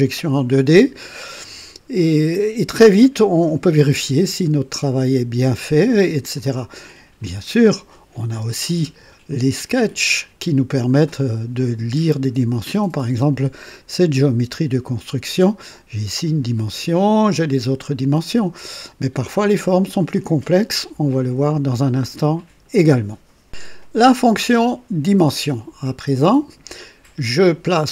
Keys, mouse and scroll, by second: 1.9-3.3 right drag, 3.8-6.6 drag, 7.2 click, 8.7 space, 8.9 space, 9.2 click, 10.8-11.2 scroll down 1, 11.6-12.3 right drag, 19.1 click.